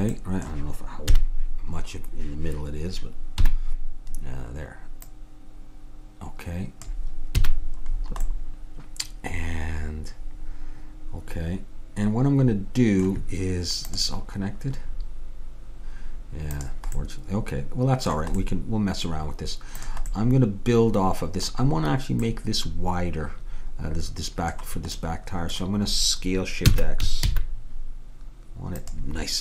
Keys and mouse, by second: 1.2 KP_3, 3.4 KP_Decimal, 5.2-6.9 drag, 7.4 a, 8.9-10.5 middle drag, 17.1-21.6 middle drag, 19.9-21.7 drag, 26.8 s.